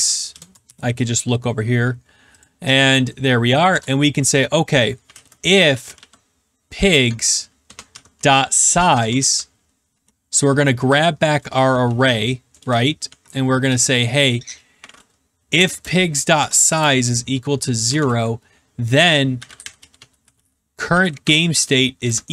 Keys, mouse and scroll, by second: 0.0-0.6 typing, 2.4 click, 3.6 Return, 4.8-9.6 typing, 6.9 Tab, 9.9 Caps_Lock, 10.8 Tab, 11.3-14.1 typing, 15.6-22.3 typing.